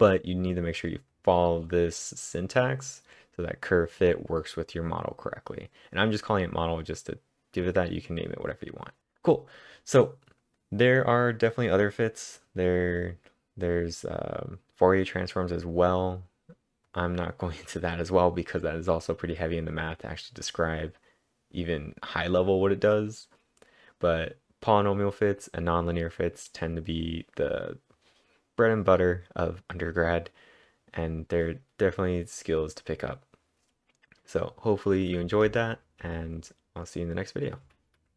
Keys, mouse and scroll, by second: 0.7 click, 1.1 click, 6.1 click, 6.2-6.9 typing, 6.4 click, 8.8-9.5 typing, 9.0-10.4 click, 16.9 click, 17.5-18.2 typing, 30.4-31.1 typing, 30.6 click, 35.0-36.0 typing, 38.1 click.